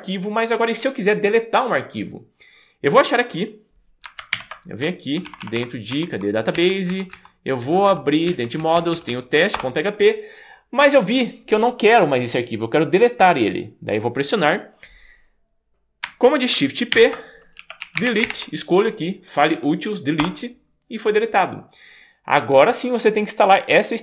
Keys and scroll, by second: 4.4 shift+super+., 5.4 alt+Left, 6.5 Right, 6.9 Down, 7.1 Down, 7.9 Down, 8.3 Right, 8.6 Down, 8.8 Down, 8.9 Down, 9.1 Down, 9.6 Return, 17.0 shift+super+p, 17.4-18.9 typing, 20.2 Return.